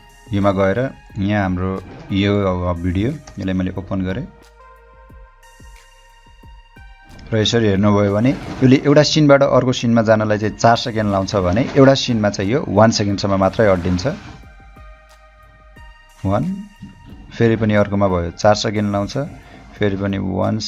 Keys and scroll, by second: 3.3 Return.